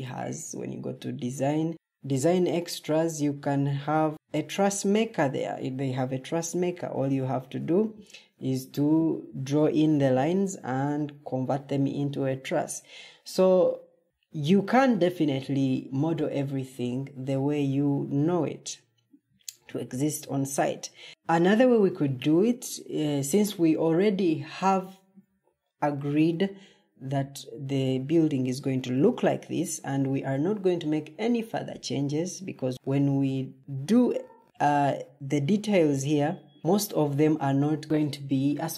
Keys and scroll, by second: 7.8 Escape, 8.2 Escape.